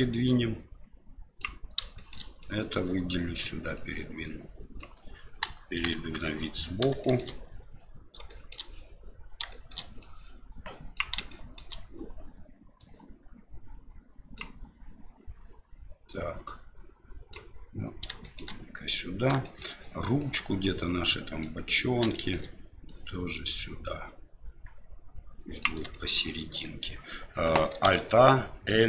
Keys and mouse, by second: 0.2-1.4 drag, 1.9 shift+middle click, 2.5 click, 3.8-4.8 drag, 5.4 KP_1, 5.9 KP_3, 7.1 shift+middle click, 8.4 shift+middle click, 9.6 shift+middle click, 10.1 click, 11.3 shift+middle click, 12.8-14.6 drag, 16.5 click, 18.2 shift+middle click, 19.5 shift+middle click, 20.3-21.4 drag, 22.1 shift+middle click, 22.8-25.8 drag, 26.0 shift+middle click, 27.9 alt+a.